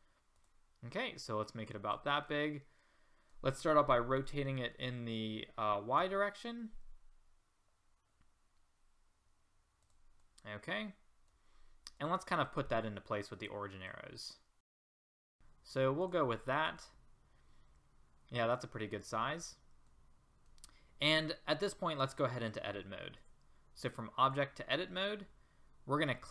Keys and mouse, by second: 1.3-4.2 drag, 4.2 r, 11.0 middle click, 12.0-12.4 middle drag, 14.8 middle click, 15.0 middle drag, 16.8-18.6 drag.